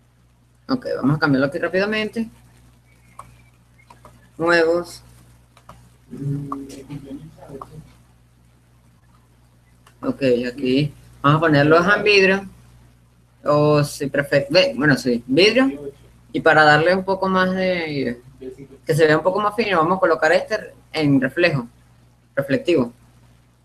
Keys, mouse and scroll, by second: 0.0 click, 1.5-3.0 right drag, 3.3-9.6 drag, 10.2-11.9 drag, 21.5-23.3 right drag, 22.8-23.6 drag.